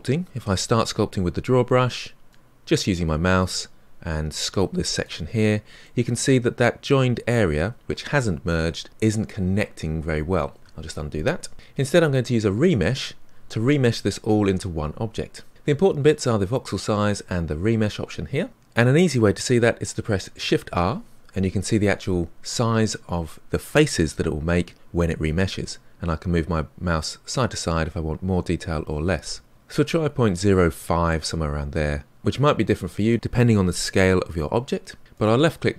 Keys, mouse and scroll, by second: 5.3-5.8 scroll up 3, 5.8-10.7 middle drag, 10.7 ctrl+z, 20.5 shift+r.